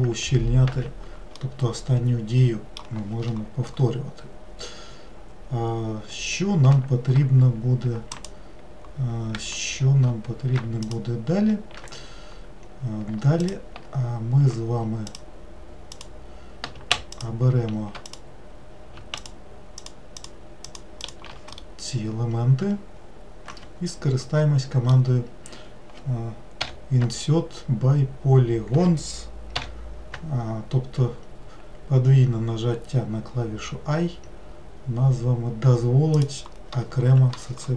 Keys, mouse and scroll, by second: 0.7 ctrl+z, 1.3-4.5 middle drag, 8.1 shift+click, 13.4 alt+click, 15.1 alt+click, 15.9 alt+click, 17.1 alt+shift+click, 18.1 alt+click, 19.2 alt+shift+click, 19.8 alt+shift+click, 20.2 alt+shift+click, 20.7 alt+shift+click, 21.0 alt+shift+click, 21.6-24.6 middle drag.